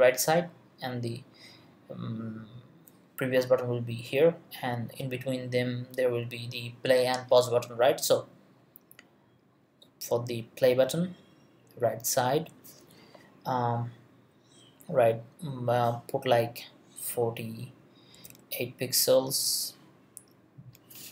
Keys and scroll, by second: 17.9-18.7 typing, 20.9-21.1 typing.